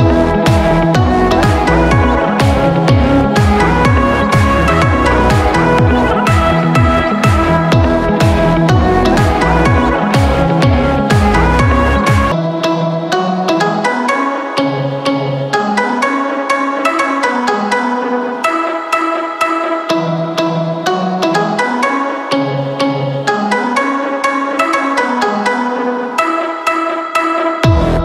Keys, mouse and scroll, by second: 10.9 click, 13.9 click, 24.7 click.